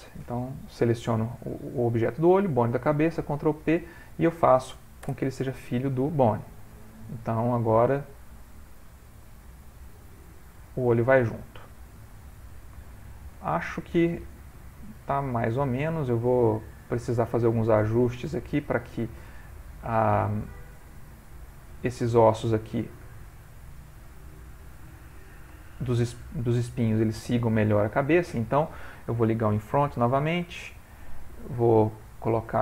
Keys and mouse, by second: 2.9 ctrl+p, 6.9 click, 7.7 click, 9.0 r, 12.2 middle click, 13.5 ctrl+middle click, 14.5 r, 22.0 middle click, 23.4 click, 24.4 click, 25.6 shift+middle click, 26.1 middle click, 27.4 shift+middle click, 27.9 middle click, 29.8 click, 32.1 click.